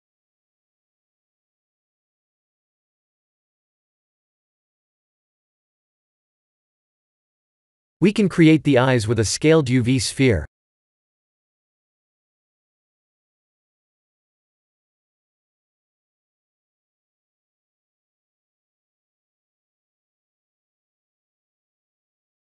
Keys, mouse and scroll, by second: 0.4 click, 4.3 click, 4.8 KP_7, 5.6 r, 8.4 middle click, 9.3 KP_1, 10.3 click, 10.8 shift+a, 14.0 s, 14.8 g, 17.5 KP_3, 18.4 g, 20.4 KP_1, 21.4 right click.